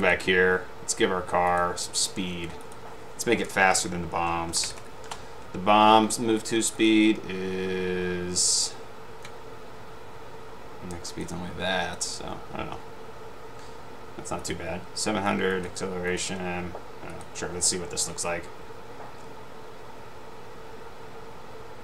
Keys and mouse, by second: 1.6 click, 4.5-5.2 typing, 12.1 click, 15.6 click, 19.4 Up.